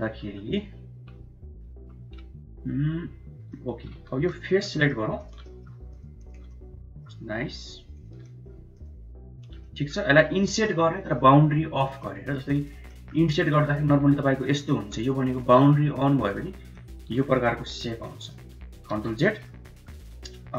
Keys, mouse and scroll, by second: 0.6 KP_1, 1.6 KP_3, 3.3 shift+middle click, 3.9 3, 4.6 middle click, 5.1 shift+click, 5.3 middle click, 6.1 shift+click, 6.4 middle click, 7.6 shift+click, 9.1 shift+click, 9.4 middle click, 10.3 middle click, 11.9 middle click, 12.7 middle click, 13.4-13.9 scroll up 1, 14.5 middle click, 16.7 shift+middle click, 18.0 middle click, 18.8 ctrl+z, 19.1 middle click, 19.5 middle click, 20.2 click.